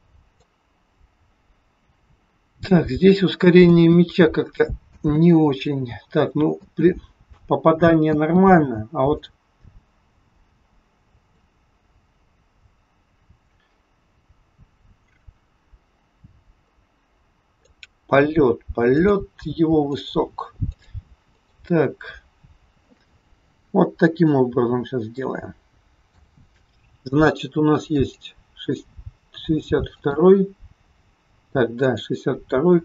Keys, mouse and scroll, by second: 0.5 click, 3.7 space, 4.9 space, 7.3 space, 8.2 space, 9.3 click, 19.1 click, 20.0 click, 20.8 click, 21.3 click, 23.4-25.0 scroll up 14, 25.1 shift+middle click, 27.9 click, 30.1 click.